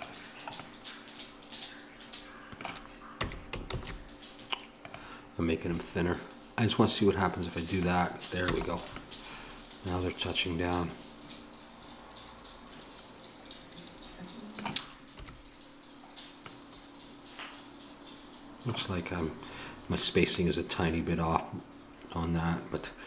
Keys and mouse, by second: 3.2 s, 6.5-8.5 drag, 8.5 a, 11.1 middle click, 15.2 KP_1.